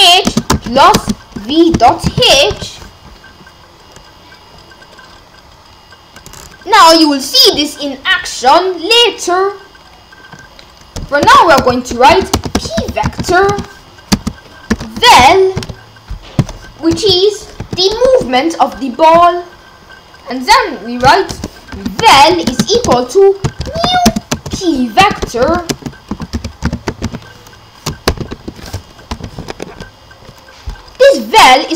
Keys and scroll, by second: 0.0-3.0 typing, 11.2 Return, 11.7-17.6 typing, 18.1 Return, 21.3 Return, 21.5-29.1 typing, 29.5 Left.